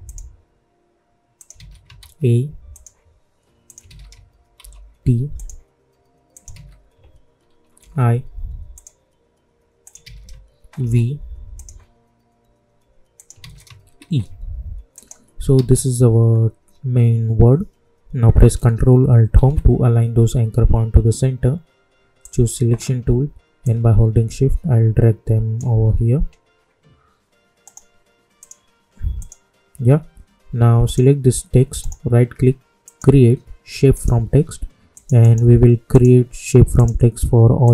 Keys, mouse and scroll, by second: 0.0 click, 1.5 ctrl+a, 2.7 click, 3.8 ctrl+a, 4.5 shift+t, 5.3 click, 6.4 ctrl+a, 7.7 shift+i, 8.7 click, 10.0 ctrl+a, 10.7 shift+v, 11.5 click, 13.3 ctrl+a, 13.9 shift+e, 14.9 click, 15.5 ctrl+a, 19.3 ctrl+alt+Home, 22.2-27.6 drag, 27.6 right click, 27.6 right click, 28.3 click, 31.7 right click, 32.8 click, 35.2 right click, 35.9 click.